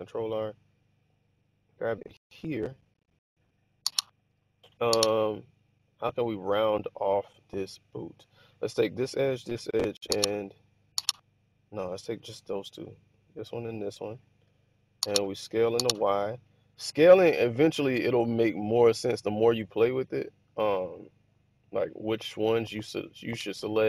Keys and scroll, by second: 15.2-15.7 typing.